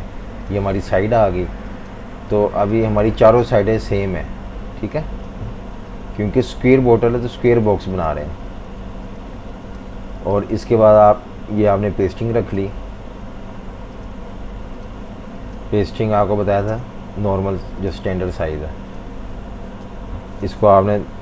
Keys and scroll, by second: 8.7 typing, 10.2 typing, 15.7-16.9 typing, 19.6-21.2 typing.